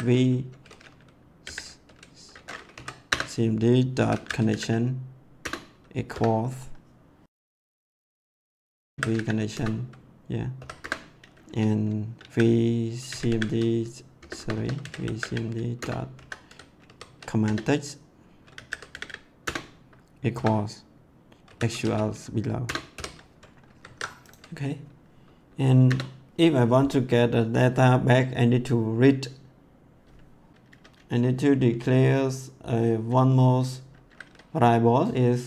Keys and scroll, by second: 1.4 m, 2.7 Down, 3.1 Return, 3.7-4.9 typing, 5.3 Return, 6.1 =, 8.3-10.5 typing, 10.8 Return, 12.1-20.3 typing, 15.7 Return, 21.4-22.9 typing, 22.6 Return, 23.6 ctrl+s, 25.8 Return.